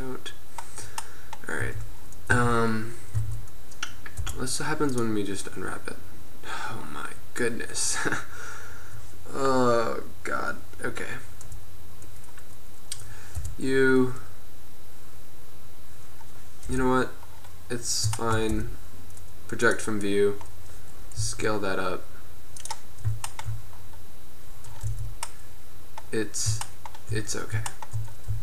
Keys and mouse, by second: 1.4 middle click, 1.8 Tab, 2.4 a, 3.3 a, 4.3 u, 12.3-13.5 middle drag, 13.5 u, 16.8 KP_1, 18.6 u, 21.4 s, 23.6 middle click, 25.2 Tab, 26.2 middle click, 26.8 middle click, 28.0 middle drag.